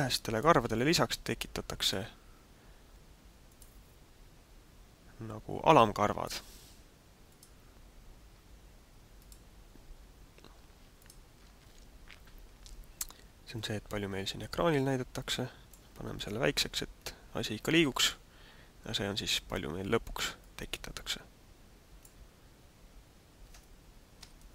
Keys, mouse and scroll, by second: 0.7 middle click, 3.4 click, 5.7 click, 7.3 click, 9.2 click, 11.0 click, 13.4 click, 16.4 middle click, 20.4 click.